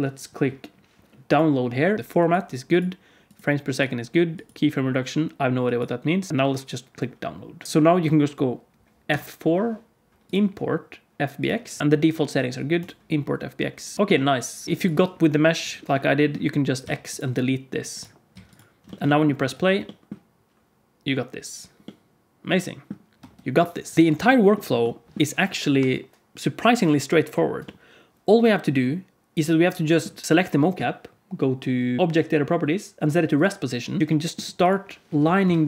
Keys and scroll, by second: 7.6 alt+a, 9.0 F4, 14.6 alt+a, 16.7 x, 18.2 x, 19.3 space, 23.1 space, 23.9 alt+a, 35.1 KP_1, 35.4 KP_3.